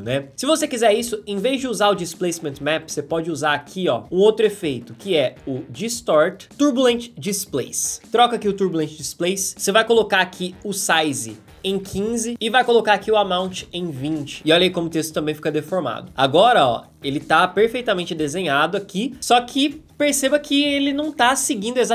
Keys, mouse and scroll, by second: 14.4-16.3 drag.